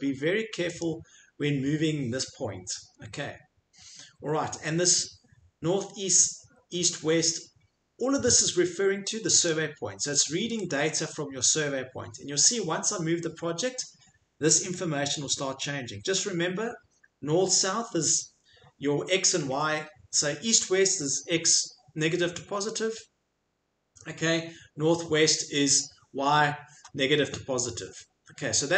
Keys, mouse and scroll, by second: 0.8 click, 9.4 click, 10.7 click.